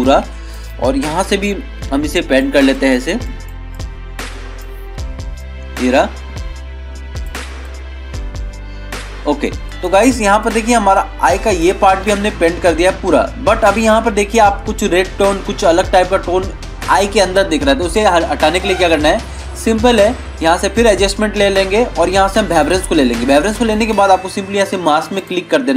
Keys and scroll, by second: 12.1 ctrl+-, 12.3 ctrl+0, 12.7 ctrl+-, 13.2 ctrl+=.